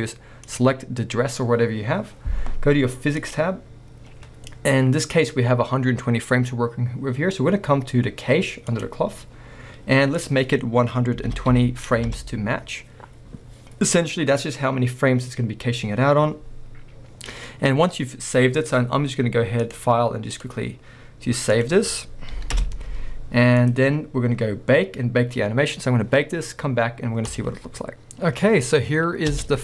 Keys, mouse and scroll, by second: 0.5 click, 3.2 click, 8.7-12.2 drag, 12.2 Return, 19.6 click, 24.0-27.9 drag, 27.9-29.6 middle drag, 28.1-28.6 scroll up 2, 28.6-29.3 scroll down 2, 29.3 space.